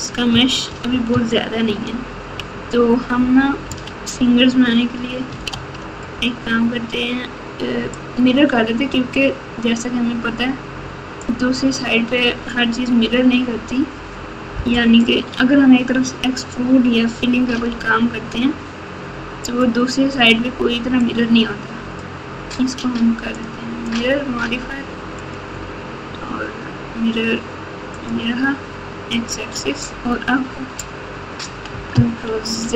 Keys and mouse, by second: 0.6 KP_Subtract, 0.9 KP_Subtract, 1.6 ctrl+KP_2, 2.1 ctrl+KP_2, 2.5 ctrl+KP_2, 3.6 KP_Subtract, 5.5 alt+z, 8.0-11.2 drag, 17.4 x, 21.0-22.0 drag, 23.3 click, 25.3-28.0 drag, 29.1 click, 29.5 Tab, 30.4 Tab, 32.2 ctrl+z, 32.6 ctrl+z.